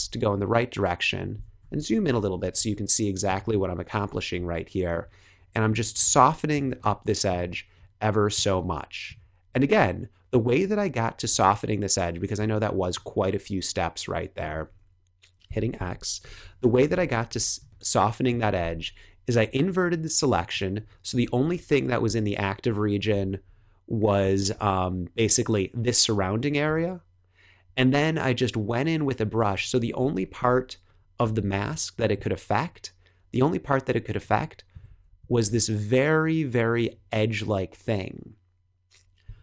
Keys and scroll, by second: 1.5 super+=, 2.3 space, 3.8 super+-, 6.6 space, 8.3 space, 15.4 x, 16.1 [, 17.2 super+h, 17.5 space, 21.0 super+-, 23.0 /, 29.7 super+=, 30.8 super+-, 34.8 super+z, 35.1 x.